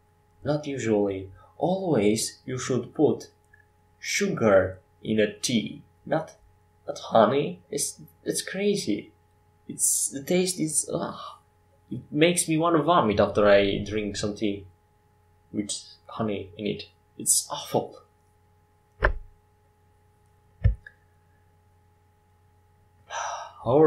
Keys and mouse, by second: 2.2 Tab, 4.9 Tab, 6.7 Tab, 7.7 Tab, 9.4 ctrl+r, 14.9 middle click, 16.8 Tab, 20.3-23.8 drag.